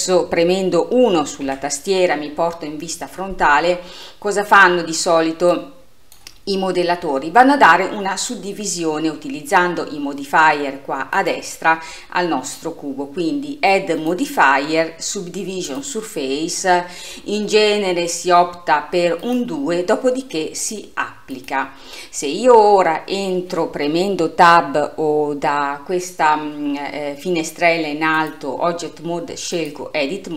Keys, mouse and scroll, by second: 1.5 KP_1, 5.6-8.7 drag, 11.2 click, 14.0-16.9 drag, 16.9-17.4 scroll up 6, 19.2-23.7 drag, 28.2-30.3 drag.